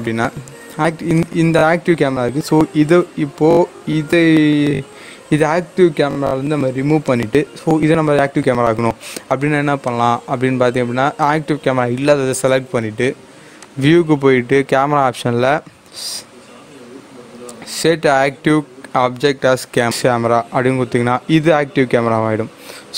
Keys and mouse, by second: 7.0 click, 9.8 click, 13.6 click, 19.9 click.